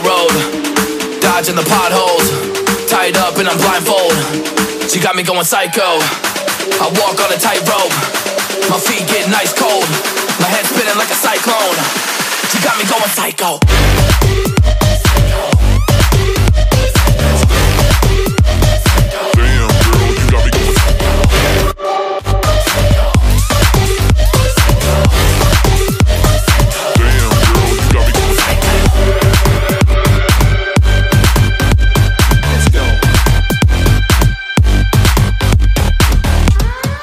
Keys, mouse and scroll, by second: 2.0 double click, 9.3-9.7 alt+scroll down 2, 9.8 alt+scroll up 1, 12.7 ctrl+g, 13.5 right click, 17.6 double click, 19.3-20.2 scroll up 1, 20.2 double click, 22.1-22.4 alt+scroll down 1, 22.4 alt+scroll up 1, 23.5-23.9 scroll up 1, 24.7-25.0 [, 25.7 double click, 26.6 ], 26.9 ], 27.0 ], 29.9-32.6 typing, 34.5 shift+click.